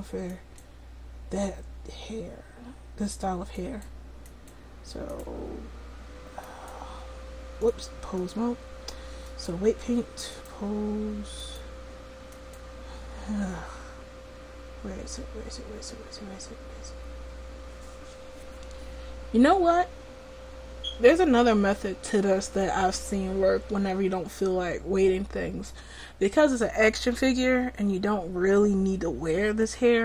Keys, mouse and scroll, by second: 7.7 click, 8.4-9.4 drag.